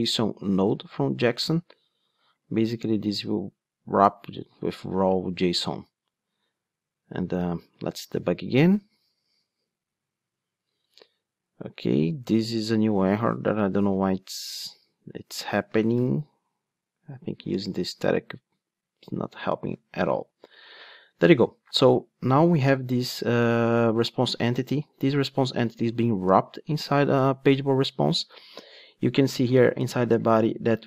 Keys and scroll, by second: 0.7 Return, 2.5 super+c, 3.1 super+v, 7.3 ctrl+d, 16.0 ctrl+d.